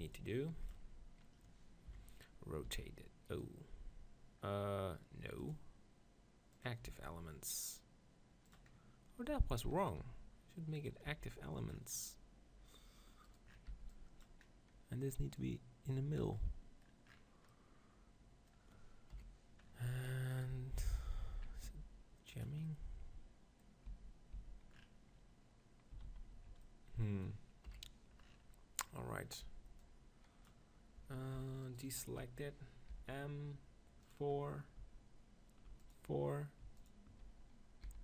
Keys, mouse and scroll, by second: 1.3-3.1 drag, 1.9 KP_7, 2.7 r, 4.9-7.3 drag, 6.9 r, 8.7-10.8 middle drag, 9.3 g, 10.0 r, 10.9 click, 11.1 g, 13.3-16.4 middle drag, 13.7 b, 16.4 click, 17.2-19.4 middle drag, 19.1 KP_1, 19.7 middle click, 20.3-21.8 drag, 21.6 s, 22.4-24.2 drag, 23.9 z, 24.4 z, 26.1 ctrl+z, 27.8 KP_1, 29.3-30.9 middle drag, 29.5 b, 31.6-33.8 right drag, 33.0 m, 33.8 click, 35.8-37.9 drag, 37.9 s.